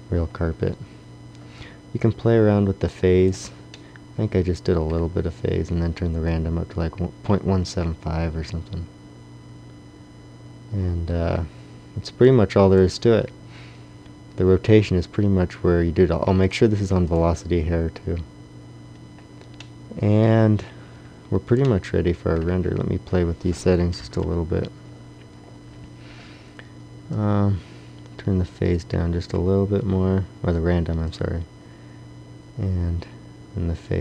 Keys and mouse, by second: 1.9 click, 6.2-18.1 drag, 19.7 middle click, 20.1 middle click, 21.4 middle click, 23.9 KP_1, 27.2 click.